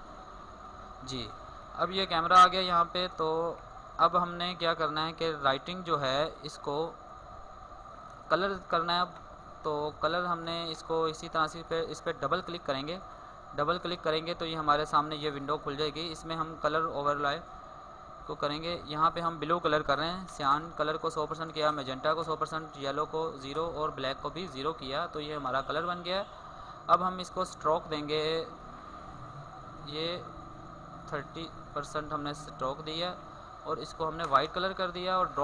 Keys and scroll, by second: 3.3 alt+space, 6.2 alt+space.